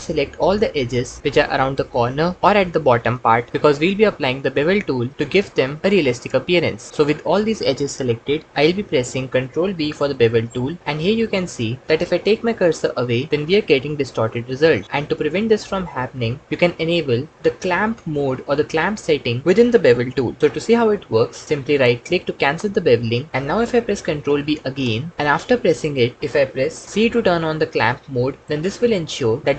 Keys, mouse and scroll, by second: 3.5 ctrl+shift+z, 8.8 alt+z, 9.8 ctrl+b, 20.9 Escape, 24.5 ctrl+b, 27.6 c.